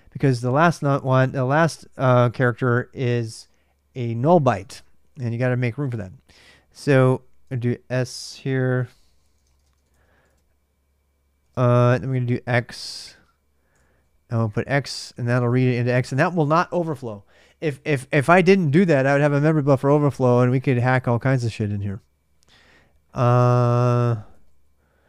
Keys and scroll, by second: 4.4 ctrl+[, 4.6 l, 4.7 l, 5.8-10.1 typing, 7.3 ctrl+[, 11.2 alt+Tab, 11.6 ctrl+[, 11.8-16.8 typing, 23.6-24.8 typing.